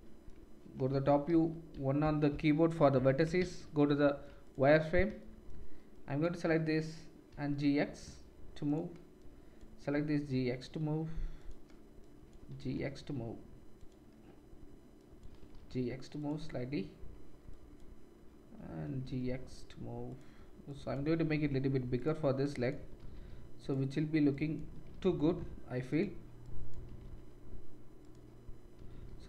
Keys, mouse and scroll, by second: 0.9 KP_7, 1.3 z, 2.9 1, 3.4 shift+z, 4.3 middle click, 4.4 click, 4.5-5.9 middle drag, 5.9-8.7 drag, 7.3 g, 8.7 middle click, 9.2-11.5 drag, 9.9 g, 11.5 middle click, 12.0-13.9 drag, 12.5 g, 13.9-14.9 middle drag, 14.9-16.3 drag, 15.3 g, 16.3-17.5 middle drag, 17.5-20.1 drag, 18.8 g, 20.1 middle click, 20.7-22.1 drag, 21.1 g, 22.1 middle click, 22.4-23.7 drag, 22.9 g, 23.7 middle click, 24.3-26.0 drag, 24.7 g, 26.0 middle click, 26.5-28.1 drag, 26.8 g, 28.1-29.2 middle drag, 28.7 g.